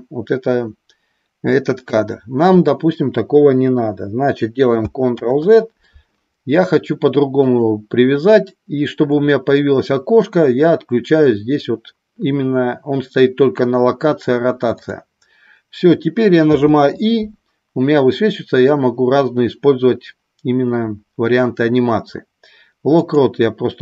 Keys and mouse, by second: 5.2 ctrl+z, 7.4-10.5 drag, 16.4 i.